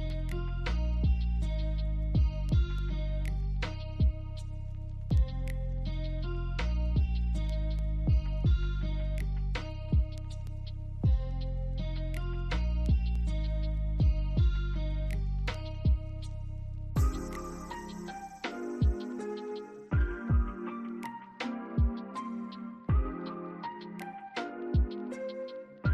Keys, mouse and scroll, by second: 1.1 middle click, 1.9 alt+click, 3.4 scroll down 1, 3.6 alt+click, 4.8 alt+scroll up 1, 5.1 alt+click, 6.4 double click, 6.7 alt+middle click, 11.3 alt+click, 12.8 double click, 13.2 ctrl+click, 14.5 alt+double click, 16.2 alt+middle click, 16.6 alt+click, 19.8 double click, 20.5 BackSpace, 21.8 alt+click, 22.7 double click, 23.8 shift+click, 23.9 shift+double click, 24.7 scroll up 1, 25.1 alt+click, 25.4 alt+right click.